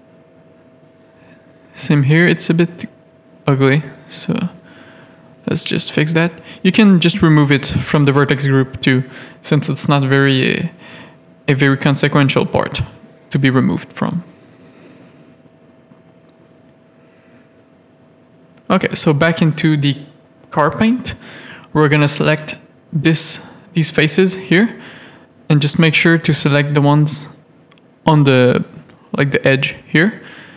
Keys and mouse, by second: 0.1 a, 0.6 shift+middle click, 0.8 z, 2.0 g, 3.9 middle click, 4.4 s, 5.5 ctrl+r, 6.6 ctrl+z, 6.7 middle click, 6.9 Tab, 7.2 alt+a, 7.5 z, 8.4 middle click, 10.1 click, 10.5 middle click, 10.9 Tab, 10.9 middle click, 12.1 3, 12.3 click, 13.0 click, 14.7 KP_3, 16.5 shift+middle click, 17.4 click, 20.4 ctrl+click, 22.3 shift+middle click, 23.7 z, 24.0 shift+middle click, 25.1 z, 27.2 ctrl+click, 27.5 shift+click, 29.2 ctrl+click.